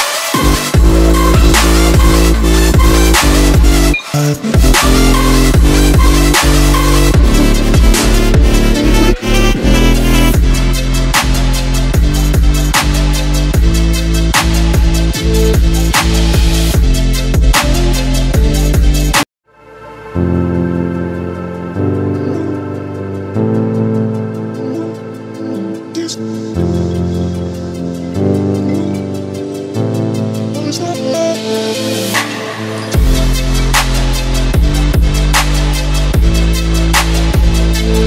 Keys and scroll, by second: 11.0-11.4 scroll down 2.